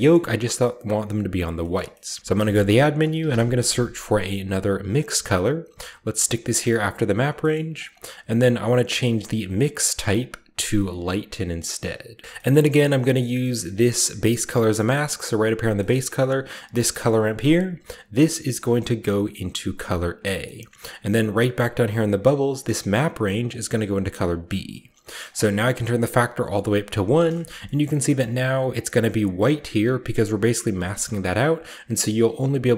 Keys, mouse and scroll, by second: 1.3-1.9 scroll down 1, 1.6 middle click, 1.9-2.3 middle drag, 1.9-3.0 scroll up 1, 2.2 shift+click, 2.2-3.6 typing, 3.0-3.6 shift+scroll up 1, 5.0 click, 6.4 drag, 6.7 click, 6.7-7.8 typing, 7.3-11.0 drag, 7.4-9.0 scroll up 1, 7.7 middle click, 9.0-11.0 scroll up 1, 12.2-13.6 drag, 12.2-14.5 scroll down 4, 12.8 middle click, 13.3 middle click, 13.7-14.6 middle drag, 14.5-15.1 scroll down 3, 14.7-15.6 middle drag, 15.1 click, 15.8-17.9 middle drag, 17.9-20.0 drag, 20.8-21.3 scroll up 2, 21.3-22.3 scroll up 1, 22.3 click, 23.3-28.7 drag, 25.0-26.6 middle drag, 26.9-28.7 scroll down 1, 27.3 shift+middle drag, 27.6-30.5 shift+middle drag, 30.8-32.4 shift+scroll up 2, 30.8-32.4 shift+middle drag, 32.4-32.7 scroll down 2.